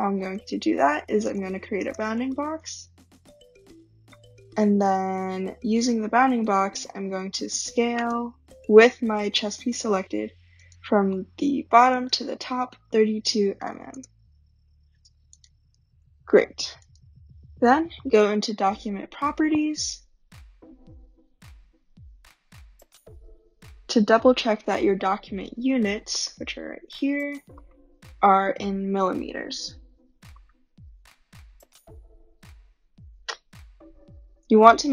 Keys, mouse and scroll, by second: 0.0-1.3 typing, 1.7 Return, 2.5-3.3 typing, 5.4-7.3 typing, 10.6 click, 12.0 click, 12.7-13.6 typing, 13.9 Return, 15.4 click, 15.4-17.3 typing, 16.2 Delete, 16.8 click, 18.0 click, 19.5-24.5 drag, 21.3 middle click, 21.3 scroll, 26.3 click, 27.7 click, 30.5 click.